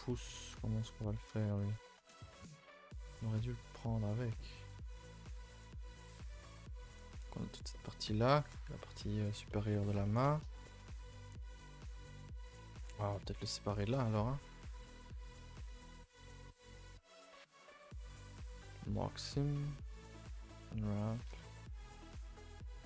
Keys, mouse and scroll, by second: 0.6 a, 0.8 a, 1.0 middle click, 1.3 3, 1.5 middle click, 2.2 scroll down 2, 2.4-5.4 middle drag, 7.7 middle click, 8.3-9.5 scroll up 1, 9.5 middle click, 9.8 scroll up 1, 10.0 shift+middle click, 10.8 scroll up 2, 11.0 a, 11.2 a, 11.6-13.2 middle drag, 13.2 a, 13.3 a, 13.5 2, 13.8 click, 14.1 shift+click, 14.5 shift+click, 14.7 middle click, 15.4 shift+click, 15.5 middle click, 16.3 shift+click, 16.7 shift+click, 16.9 middle click, 17.5 shift+click, 17.7-18.7 shift+middle drag, 18.7 right click, 18.8 a, 20.5 u, 21.1 a, 21.3 a.